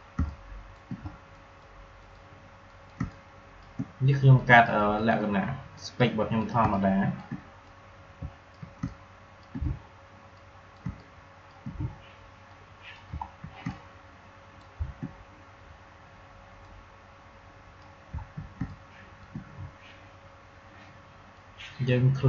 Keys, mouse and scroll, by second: 0.1 space, 0.2 click, 0.5 space, 1.3 click, 3.4 space, 4.3 click, 6.5 space, 6.7 click, 7.0 space, 7.6 click, 8.7 space, 8.9 click, 9.1 space, 10.3 click, 10.7 space, 10.9 click, 10.9 click, 11.3 space, 12.4 click, 13.2 alt+scroll down 1, 13.5 space, 13.6 click, 14.0 space, 16.5-18.2 drag, 18.2 alt+scroll down 1, 18.5 space, 18.6 click, 18.9 space, 21.3-22.2 drag.